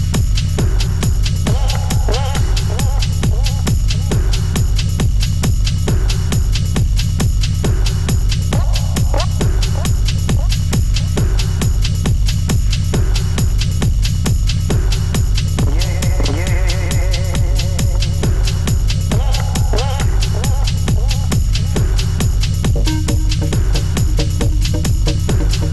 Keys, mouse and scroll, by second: 8.7-10.5 scroll down 2, 10.5 click, 11.1 n, 13.3-16.6 drag, 17.5-19.5 drag, 20.0 click, 20.4-20.9 middle drag, 20.9 click, 21.5 g, 22.8 scroll down 1, 23.0-23.9 shift+middle drag, 23.9 `, 24.6 scroll up 2, 25.2 shift+scroll up 1, 25.3 shift+middle click.